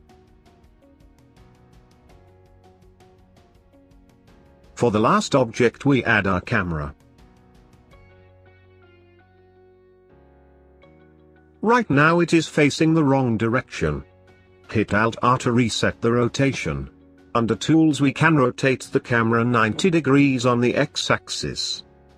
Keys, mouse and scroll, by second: 3.2-8.7 drag, 8.8-10.3 middle drag, 10.3-12.4 scroll down 1, 12.4 click, 14.6 alt+r, 15.9-17.2 middle drag, 17.2 alt+r, 17.8 click, 20.6-22.1 drag.